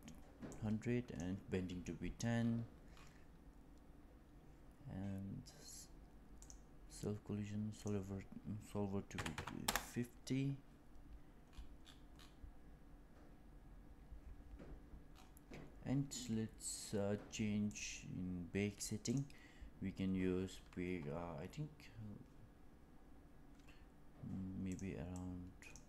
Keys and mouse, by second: 0.4 click, 6.3 click, 7.7-11.0 drag, 19.0-25.8 drag.